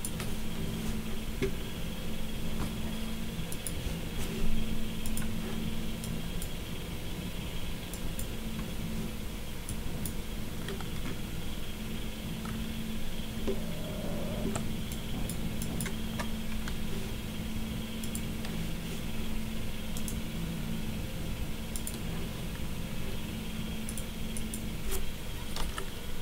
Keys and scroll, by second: 25.6 BackSpace.